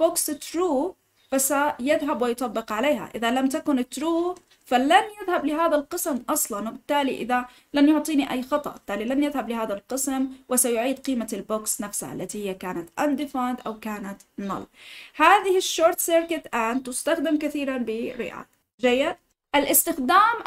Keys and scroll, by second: 19.3 ctrl+z.